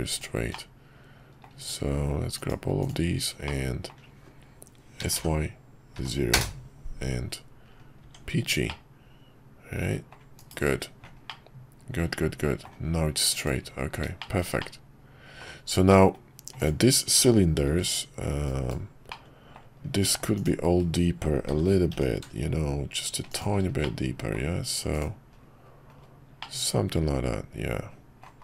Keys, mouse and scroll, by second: 0.5 middle click, 3.5 middle click, 8.0 Tab, 8.7-10.1 middle drag, 10.3 /, 11.3-12.6 middle drag, 14.2 shift+middle click, 14.6-15.4 middle drag, 15.9 middle click, 16.6 click, 17.7 g, 19.1 middle click, 20.3 click, 23.9 middle click, 24.9-26.4 drag, 26.4-28.3 middle drag.